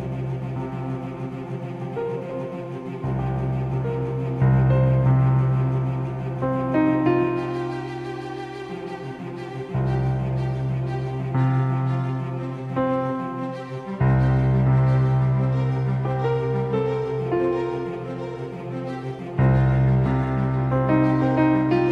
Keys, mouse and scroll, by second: 5.8-8.3 drag, 7.9 l, 11.0-14.4 drag, 21.1-21.9 middle drag.